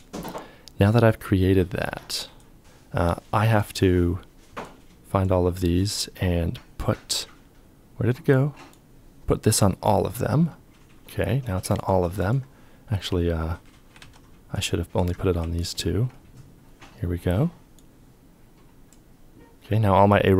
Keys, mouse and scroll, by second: 2.6 f, 13.5 ctrl+z, 15.2 ctrl+click.